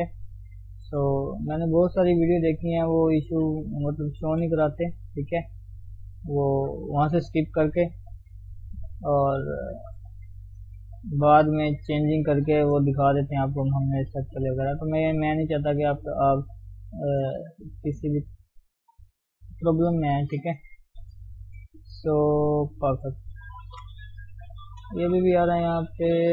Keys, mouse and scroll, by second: 0.0 click, 1.1 click, 1.3 g, 2.6 click, 2.9 g, 4.2 click, 4.4 g, 5.2 click, 5.5 g, 6.5 click, 6.7 g, 7.5 click, 8.0 g, 8.8 click, 8.9 g, 9.7 click, 9.9 g, 10.8 click, 11.0 g, 11.9 click, 12.2 g, 13.2 click, 13.7 g, 16.2 g, 17.9 KP_3, 18.4-18.8 scroll up 2, 18.8 scroll down 1, 19.0 shift+middle click, 19.3 scroll up 1, 20.0 click, 20.9 g, 21.6 click, 21.9 g, 23.0 Tab, 23.2 scroll down 3, 23.7 ctrl+1, 23.9 ctrl+2, 24.3-24.7 scroll up 1, 24.7 shift+middle click, 24.9 scroll up 1, 25.0 Tab, 25.2 middle click, 26.0 Tab.